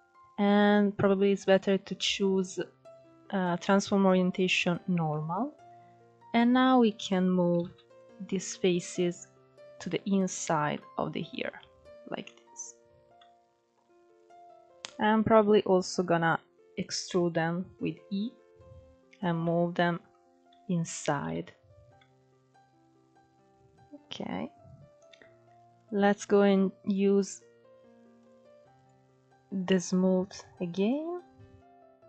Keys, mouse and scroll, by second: 4.8-6.0 middle drag, 6.0-7.3 drag, 7.3 ctrl+z, 7.7 click, 8.7 click, 10.4 middle click, 11.3 Tab, 11.4-11.9 scroll down 5, 11.9 middle click, 12.3 scroll up 5, 12.6 Tab, 12.8-13.8 middle drag, 13.8 click, 16.6 e, 17.9-18.9 drag, 19.1-20.1 middle drag, 20.1 s, 21.0 Tab, 21.2-21.6 scroll down 7, 21.6-23.7 middle drag, 23.7-24.4 scroll up 2, 24.4-25.4 scroll up 3, 25.4-30.3 drag, 30.3 scroll up 1, 30.6-32.0 drag.